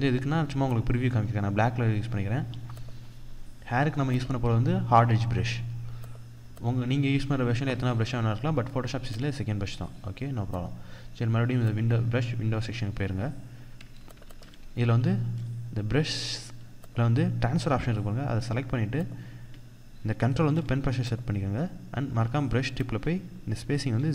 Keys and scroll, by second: 13.8 ctrl+=, 16.4 ctrl+=.